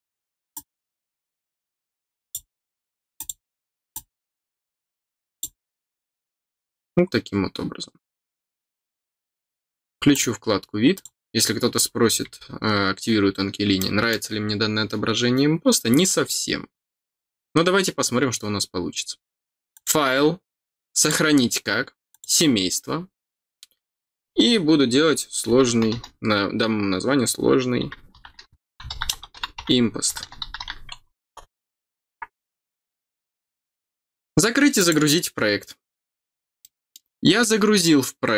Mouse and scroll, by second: 0.5-2.3 drag, 3.1 click, 3.9-5.4 drag, 7.4 scroll down 1, 10.1 click, 10.9 click, 11.5 scroll down 1, 13.7 middle click, 19.7 click, 20.9 click, 22.1 click, 34.7 click, 36.6 middle click.